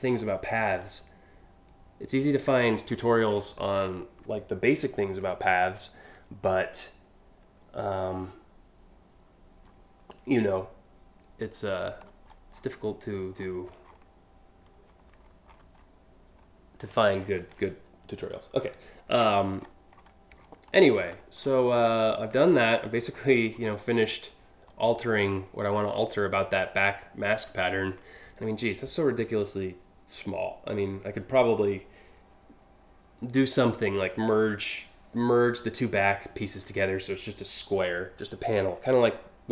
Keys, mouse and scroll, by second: 0.1-2.1 ctrl+drag, 2.5-3.6 scroll up 10, 11.6-12.6 scroll up 4, 13.0 scroll down 1, 13.5 alt+scroll down 1, 14.8-15.5 alt+scroll up 5, 16.0-16.6 alt+scroll down 2, 16.8 alt+click, 19.2 click, 19.6 click, 20.0 ctrl+click, 20.4 ctrl+click, 20.8-21.2 ctrl+scroll up 2, 22.2 scroll up 1, 22.8-23.2 alt+scroll up 2.